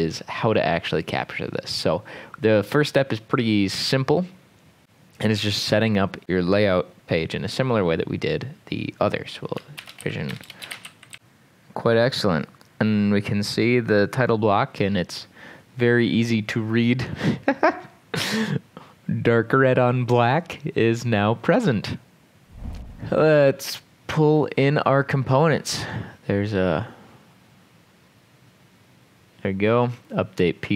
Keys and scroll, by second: 9.8-11.4 typing, 23.4 ctrl+s.